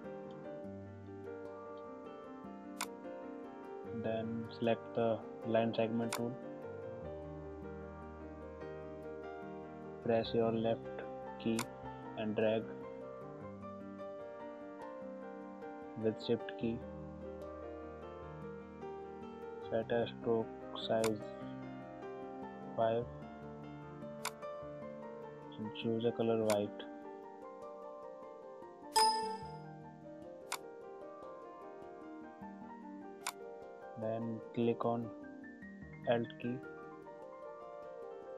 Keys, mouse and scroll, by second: 2.3 space, 6.1 click, 11.6-21.1 drag, 24.3 click, 29.0-33.2 drag.